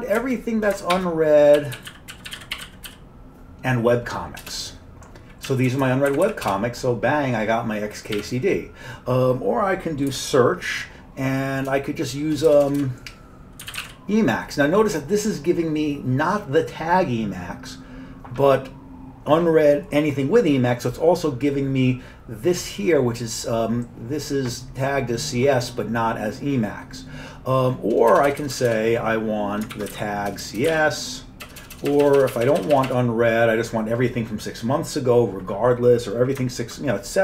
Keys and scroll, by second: 0.2 space, 1.4-3.4 typing, 4.5 Return, 5.5 Down, 5.7 Down, 5.9-13.9 Down, 6.2 Up, 6.3 Up, 6.5 Return, 8.0-8.7 typing, 10.1 typing, 11.7-12.3 typing, 13.4-14.3 typing, 28.1-32.6 typing.